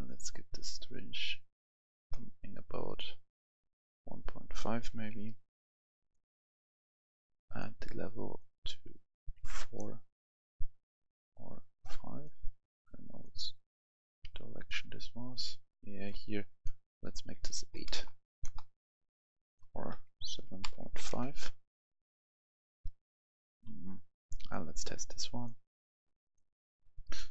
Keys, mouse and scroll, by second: 5.1 5, 6.0 click, 9.5 4, 9.6-10.7 drag, 11.8 5, 12.1 click, 14.2 9, 14.6 click, 17.8 BackSpace, 18.4 Return, 19.3 click, 20.2 7, 21.0 5, 21.1 Return, 23.6 scroll down 1, 24.3-27.3 drag.